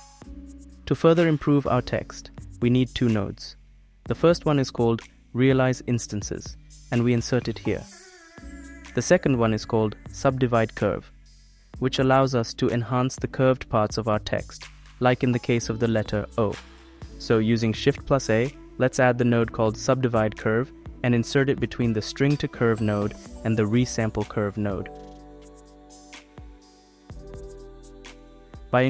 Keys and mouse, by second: 1.8 click, 2.1 shift+a, 8.0 click, 8.8 click, 18.3 click, 19.0 shift+a, 27.6 click.